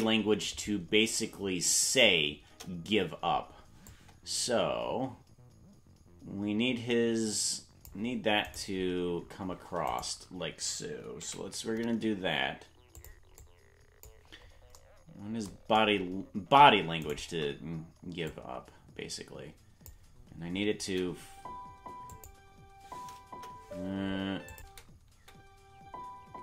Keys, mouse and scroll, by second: 2.5 KP_0, 3.9-7.9 drag, 8.5 right click, 13.4 click, 13.4 right click, 13.4 g, 17.1 shift+right click, 18.2 click, 20.8 space, 22.1 click, 23.3 KP_0, 24.5 click, 24.6 space, 25.4 space.